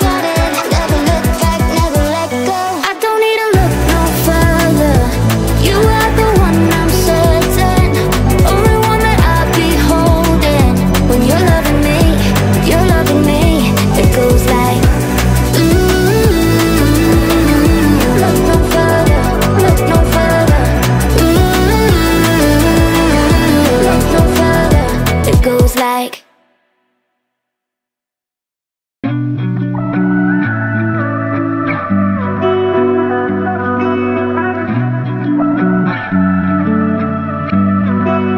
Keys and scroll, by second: 21.6 ctrl+z.